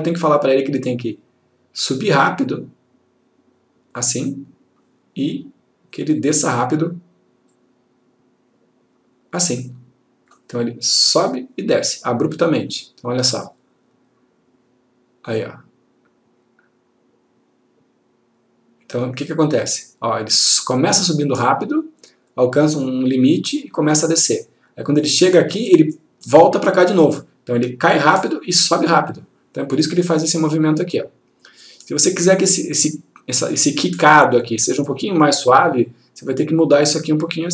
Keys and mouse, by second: 0.5 click, 6.3 click, 12.7 click, 36.0 click.